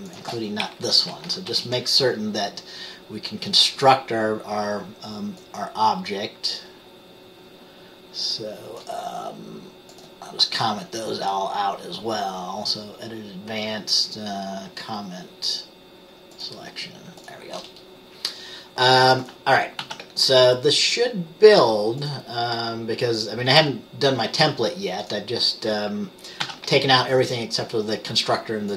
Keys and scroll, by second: 1.6 typing, 19.9 ctrl+s, 26.5 ctrl+s.